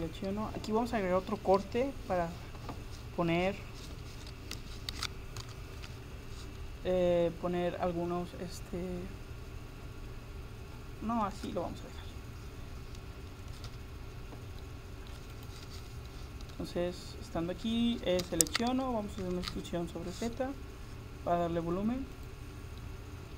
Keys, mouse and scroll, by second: 4.6 a, 5.4 ctrl+r, 15.8 Escape, 16.1 middle click, 18.2 a, 18.9 a, 19.2 e, 22.8-23.3 middle drag.